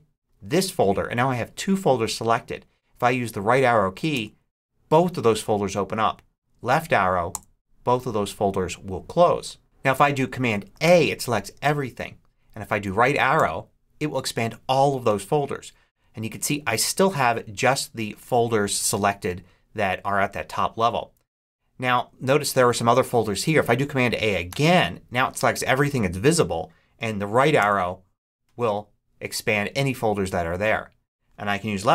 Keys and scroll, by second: 4.0 Right, 7.2 Left, 10.7 super+a, 13.2 Right, 24.4 super+a, 27.4 Right.